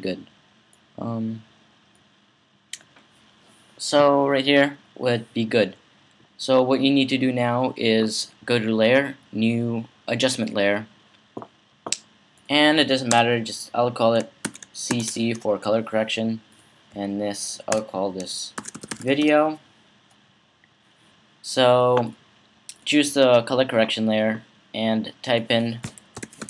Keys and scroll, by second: 14.2-15.4 typing, 18.3-19.5 typing, 25.7-26.4 typing.